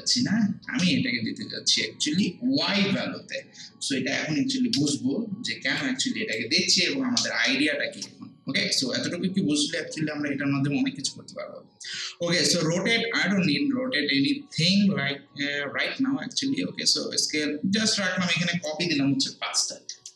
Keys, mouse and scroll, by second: 0.6 ctrl+c, 1.7-3.0 drag, 2.8 ctrl+v, 4.7 Return, 5.8-7.2 drag, 7.2 0, 7.9 Return, 18.3 click, 19.5 5.